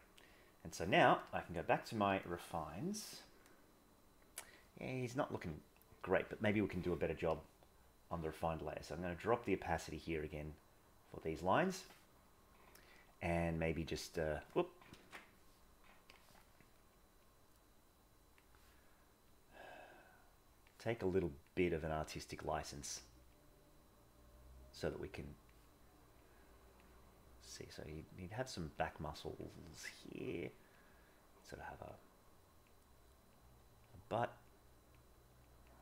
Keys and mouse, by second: 0.0 click, 4.5 middle click, 8.9-11.2 drag, 13.5 click, 15.0 ctrl+z, 17.1-18.3 drag, 19.3-20.6 drag, 21.3 click, 21.7 click, 22.0 click, 22.6 click, 23.0 click, 23.3-25.4 drag, 26.2 click, 27.3 click, 28.7 click, 29.3 click, 30.1 click, 30.5 click, 31.0 click, 32.3 click, 33.0 click, 33.4 click, 33.7 click, 34.4 click, 35.2 click, 35.4 click.